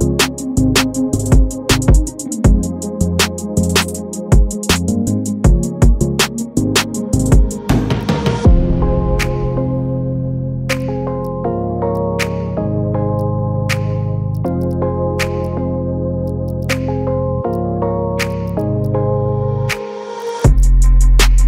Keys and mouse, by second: 0.5 shift+middle drag, 1.6 shift+middle click, 2.3 shift+middle click, 3.4 Tab, 4.3 Tab, 5.5 shift+click, 7.0 g, 9.1 click, 9.4 KP_Decimal, 9.6 click, 9.9 middle click, 10.2 click, 10.3 middle click, 10.7 shift+middle click, 11.2 shift+middle click, 11.6 KP_1, 13.3 g, 14.6 shift+click, 14.8 g, 15.6 middle click, 16.2 click, 16.7 KP_1, 16.8 g, 18.4 shift+click, 18.6 g, 19.4 middle click, 20.5 shift+click, 20.9 g.